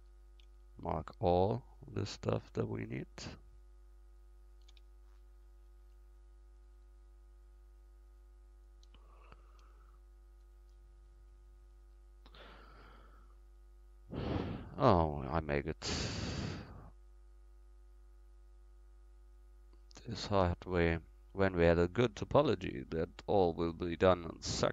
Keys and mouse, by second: 0.9-5.7 right drag, 7.0-9.9 right drag, 9.9 alt+shift+e, 18.8-21.6 right drag, 20.6-23.3 middle drag, 23.3-24.7 right drag.